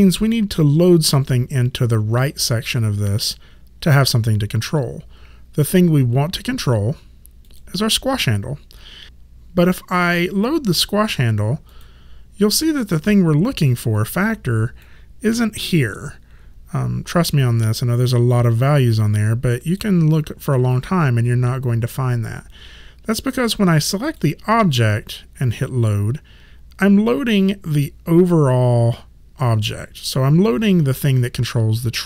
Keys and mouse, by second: 7.5 click, 11.7 click, 14.8 click, 24.1 click.